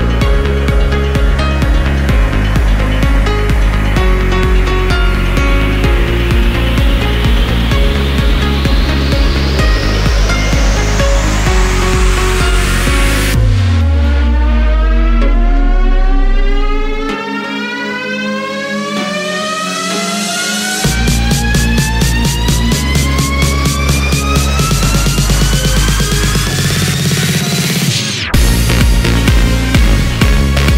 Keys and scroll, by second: 6.5 ctrl+c, 8.6-10.3 typing.